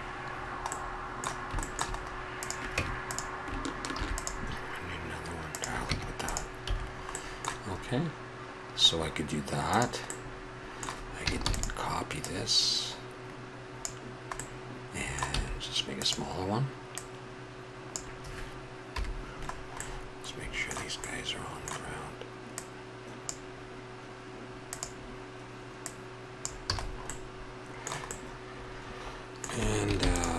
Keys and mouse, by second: 2.4-3.2 drag, 2.8 Tab, 4.0 ctrl+r, 5.9 Tab, 6.7 a, 9.7-11.4 drag, 11.4 shift+d, 15.4 s, 18.9 KP_Decimal, 21.4-22.2 middle drag, 22.6 middle click, 23.2-24.5 drag, 24.6-26.7 drag, 26.7 a, 27.6-29.8 middle drag, 30.0 ctrl+s.